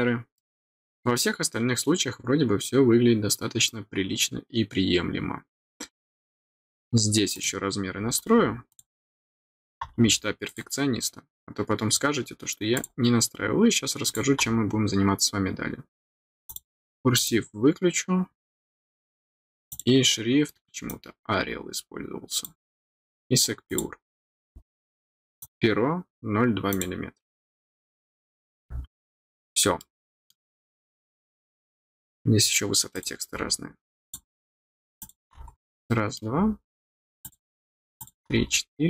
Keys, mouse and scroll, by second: 0.3 middle click, 1.7-3.6 scroll down 1, 8.6 click, 10.4 click, 12.7 click, 14.0 click, 16.4 click, 17.1 click, 19.6 click, 20.8-22.4 drag, 23.6 click, 25.3 click, 26.6 click, 29.7 middle click, 30.6 scroll down 1, 31.7 scroll up 1, 32.9 click, 34.0 click, 34.9 click, 35.5 scroll down 1, 35.8 middle click, 37.2 click, 37.9 click, 38.3 scroll down 1.